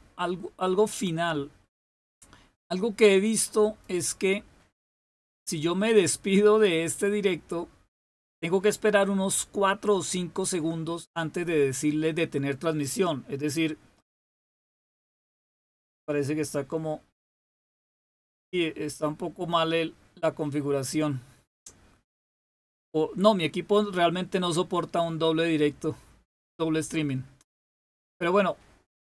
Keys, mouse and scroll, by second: 3.5 click.